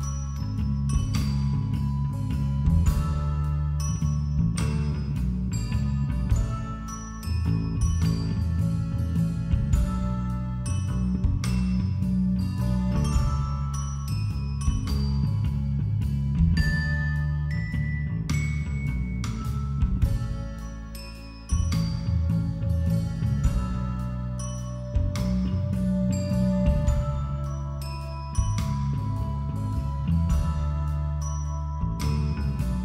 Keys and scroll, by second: 0.4 ], 5.4 [, 5.8 b, 9.5 ], 13.4-15.3 typing, 17.8 ], 17.9 [, 18.8 x, 19.1 b, 21.7 ], 25.3 ctrl+-, 25.3 ctrl+=, 25.5 ctrl+-, 25.9 ctrl+=, 26.6 ctrl+=, 27.0 ctrl+-.